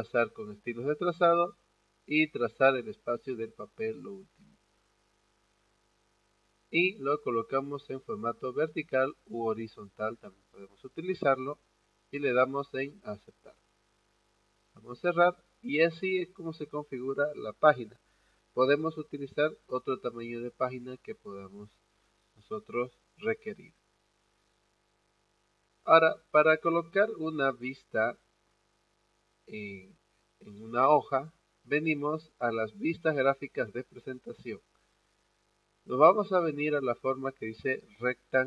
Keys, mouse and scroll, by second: 7.3 click, 9.1 click, 12.9 click, 14.8 click, 38.3 click.